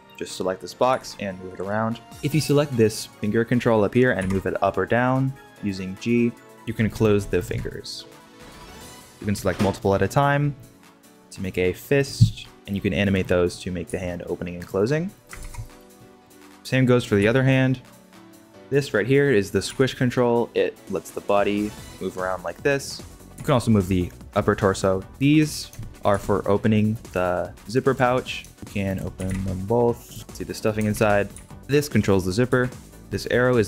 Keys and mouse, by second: 0.0 click, 0.9 g, 2.1-4.1 middle drag, 4.1 g, 9.7 g, 11.2 g, 12.2 middle drag, 12.5-13.2 middle drag, 13.8 g, 15.1 middle click, 15.4 alt+g, 15.6 middle click, 15.8 ctrl+Tab, 16.0 drag, 17.1 g, 18.3 g, 18.5 ctrl+Tab, 19.6 g, 23.3 g, 26.1 g, 28.9 click, 29.1 g, 30.9 alt+g, 31.5 ctrl+Tab, 32.5 r.